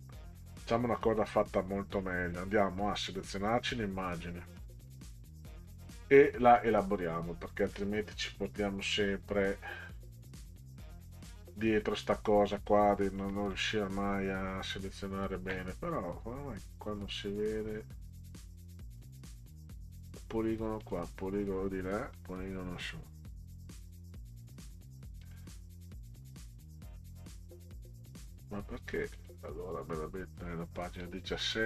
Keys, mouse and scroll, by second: 1.0 click, 4.9 click, 6.6 click, 11.3-11.8 drag, 12.5 click, 13.3 middle click, 19.0 click, 20.8 click, 22.1 click, 25.2 click, 29.1 click, 31.0-31.4 middle drag.